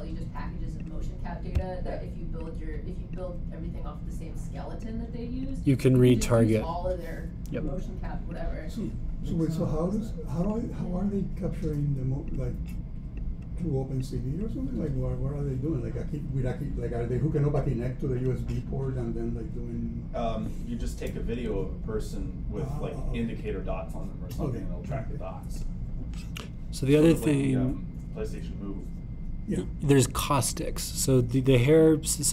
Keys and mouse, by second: 0.8-2.6 drag, 3.4-5.9 drag, 6.4 click, 9.4-13.3 drag, 16.5-18.6 middle drag, 18.6-20.6 drag, 21.2-22.2 drag, 22.4 click, 22.7-24.4 drag, 26.0 click, 26.8-28.2 middle drag, 28.2-32.3 drag.